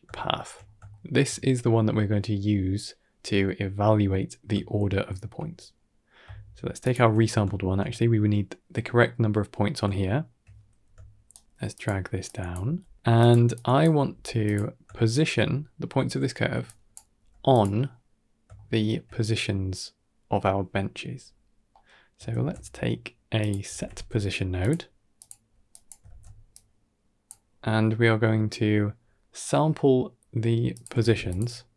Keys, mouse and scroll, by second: 0.0 shift+middle drag, 0.5 scroll up 1, 0.8 shift+middle drag, 4.5-5.1 shift+middle drag, 5.6 middle click, 6.7 ctrl+shift+click, 7.4 shift+middle click, 8.9 middle click, 9.8-10.1 shift+middle drag, 11.2 shift+right drag, 11.7 g, 12.5 drag, 12.5 g, 12.9 g, 13.4-13.8 drag, 14.0 g, 14.7-15.1 shift+middle drag, 16.0 shift+middle click, 16.5 drag, 17.4 g, 18.4-18.7 shift+middle drag, 21.6 middle click, 22.2 shift+a, 25.6 drag, 25.9 ctrl+x, 26.4 click, 27.4 scroll up 1, 27.6-28.1 middle drag, 30.9 click, 31.2 shift+d.